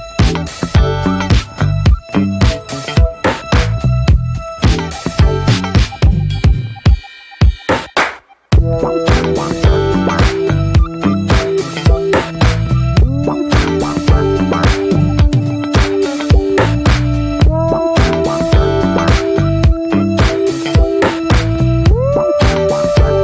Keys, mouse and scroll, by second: 2.3-4.8 scroll up 2, 4.9-7.5 drag, 7.5 ctrl+z, 8.9-23.2 drag.